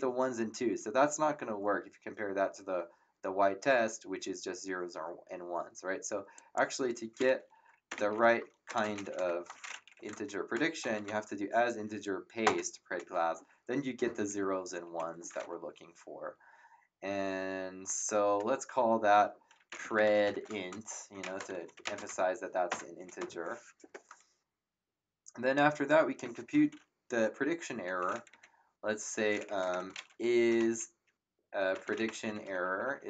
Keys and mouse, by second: 6.3 click, 7.6-10.5 typing, 9.9 End, 12.4 ctrl+Return, 14.9 Up, 19.4-22.3 typing, 22.7 ctrl+Return, 25.5 click, 28.3 End, 29.7 shift+Home, 30.2-33.0 typing.